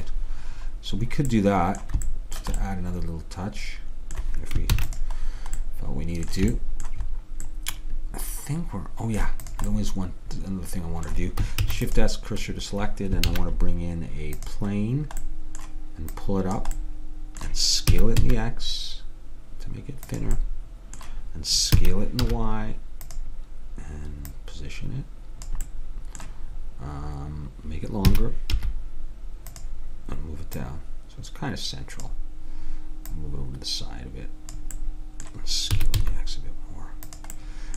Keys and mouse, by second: 0.3-3.0 middle drag, 4.8 ctrl+s, 8.0-9.1 middle drag, 9.5-11.4 drag, 11.6 shift+s, 13.4 shift+a, 16.2-18.0 drag, 18.0 s, 21.9 s, 24.4-26.2 drag, 25.8-28.2 middle drag, 28.2 s, 30.7-32.5 drag, 33.2-35.1 drag, 35.8 s.